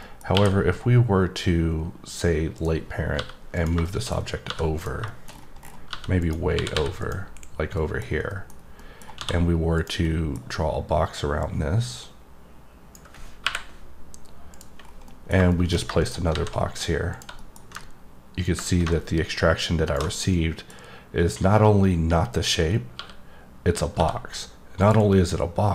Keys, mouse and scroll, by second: 0.0 middle click, 2.5 click, 3.5 click, 3.8 middle click, 4.1 scroll down 3, 4.7 click, 5.0 middle click, 5.2-6.2 scroll down 6, 6.2 click, 7.0 click, 7.7 middle click, 8.1 scroll down 1, 8.3 middle click, 8.5 scroll up 1, 8.8 middle click, 9.7 click, 10.0 middle click, 11.4 click, 14.5 click, 14.8 scroll down 1, 15.1 middle click, 15.5 middle click, 16.0 right click, 17.1 click, 17.4 middle click, 18.4 click, 20.2 middle click, 24.8 click, 25.1 middle click.